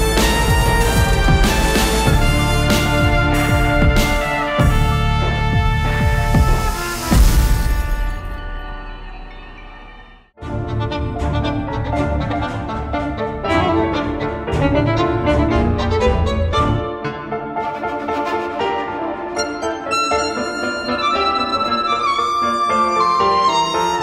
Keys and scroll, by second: 13.8 f.